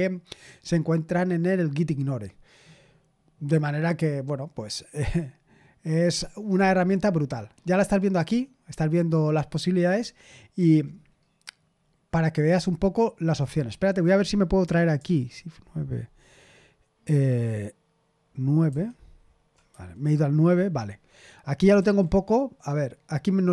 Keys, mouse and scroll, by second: 10.5-11.7 scroll down 1, 11.7-12.3 scroll down 1, 12.3-13.0 scroll up 2, 18.6 super+), 19.7 super+9, 21.7 super+h.